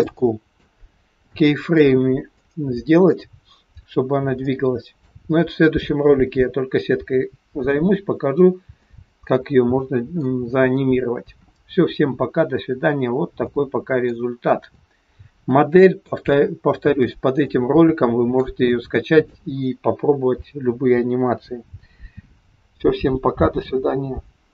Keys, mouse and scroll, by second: 0.7 scroll up 3, 1.2 shift+middle click, 2.4 middle click, 4.5 shift+middle click, 8.7 middle click, 10.8 scroll down 2, 12.3-12.8 scroll down 4, 13.3 middle click, 14.6 middle click, 16.2 shift+middle click, 16.2 shift+middle click, 17.4 middle click, 18.6 middle click, 18.6 scroll up 1.